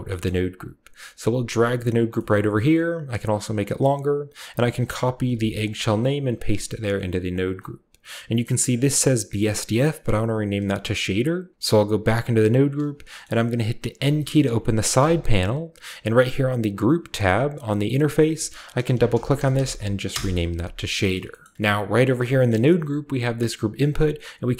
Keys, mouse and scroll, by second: 0.2-1.9 middle drag, 0.9 click, 2.3 scroll up 1, 3.1 click, 3.7 click, 4.8 click, 5.3 ctrl+c, 5.6 ctrl+click, 6.0 ctrl+click, 6.3 ctrl+v, 6.4 ctrl+click, 7.3-9.1 ctrl+drag, 11.5 click, 12.8-13.9 scroll down 1, 13.2-14.5 middle drag, 13.9-14.5 scroll down 1, 13.9 b, 14.5 right click, 14.9 n, 16.8-17.7 drag, 17.7 typing, 17.8 click, 17.9 click, 18.9-20.5 typing, 20.9-21.5 scroll down 1, 21.4 middle click, 21.5-23.5 scroll up 1, 22.1-24.5 drag, 22.3-24.5 middle drag, 22.6 g.